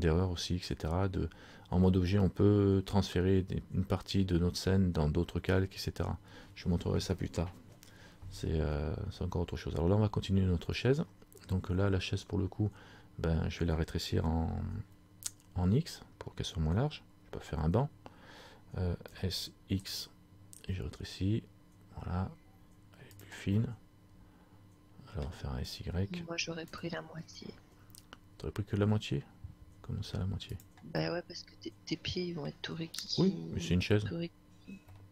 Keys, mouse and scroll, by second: 23.7 middle click, 26.8 s, 31.2 middle click, 33.5-34.2 scroll up 2, 34.5-35.0 scroll up 3, 35.0 middle click.